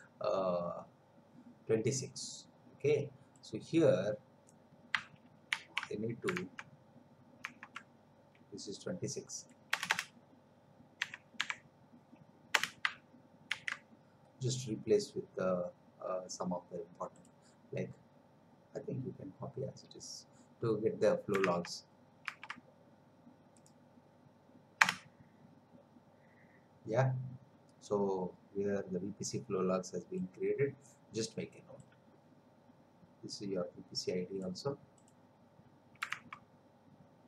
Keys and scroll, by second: 5.5 ctrl+c, 6.6 alt+Tab, 9.7 Return, 11.0 2, 11.4 6, 12.6 Return, 13.5 ctrl+v, 21.6 alt+Tab, 24.8 Return, 36.3 alt+Tab.